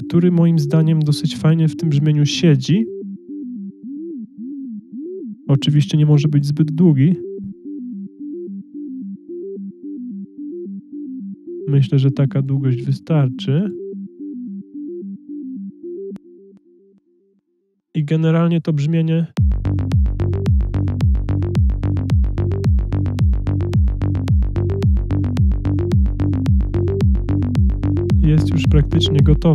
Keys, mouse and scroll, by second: 22.9 click, 24.0 click, 26.8 click.